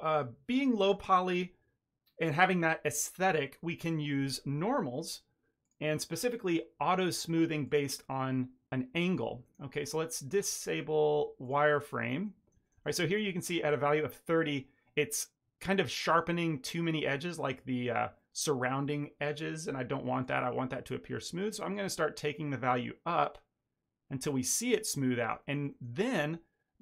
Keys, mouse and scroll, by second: 5.6 click, 6.1 scroll down 2, 7.6 click, 9.4 ctrl+middle click, 10.3 click, 11.7 middle click, 12.2 middle click, 12.6 shift+middle click, 12.8 ctrl+middle click, 13.0 middle click, 14.4 middle click, 20.1 shift+click, 22.3 click, 24.4 middle click, 25.3 ctrl+middle drag, 26.1 middle click.